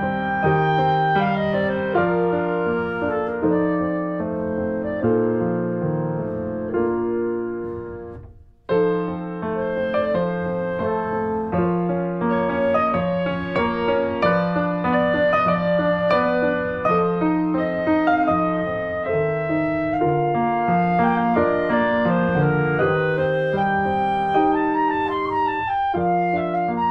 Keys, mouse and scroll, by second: 0.0 click, 1.2 r, 2.1-3.8 middle drag, 3.8 click, 4.6 middle click, 5.0 Tab, 5.1 click, 5.2-7.3 middle drag, 7.3 click, 7.4 Tab, 7.6 click, 8.1 alt+middle click, 8.8 r, 9.8 click, 10.6 r, 13.7 click, 14.4 middle click, 14.9 Tab, 15.0 click, 15.1-17.8 middle drag, 17.8 scroll up 1, 18.0 click, 18.2 Tab, 18.3 middle click, 19.1 r, 21.9-23.5 drag, 23.5 r.